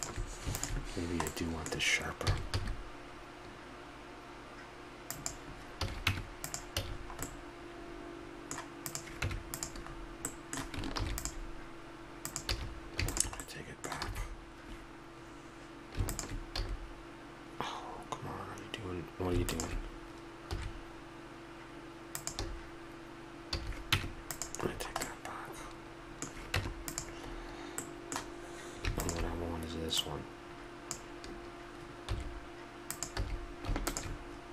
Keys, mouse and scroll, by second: 1.0-5.1 drag, 2.2 s, 5.8 a, 6.1 Tab, 6.8 a, 7.2-8.0 middle drag, 9.2 Tab, 11.0 ctrl+r, 12.5 a, 13.5-14.7 drag, 14.1 a, 14.1 s, 16.6 a, 20.5 s, 23.5 a, 23.9 Tab, 24.7-25.5 middle drag, 25.6-26.0 middle drag, 26.5 Tab, 32.0 s, 33.2 a.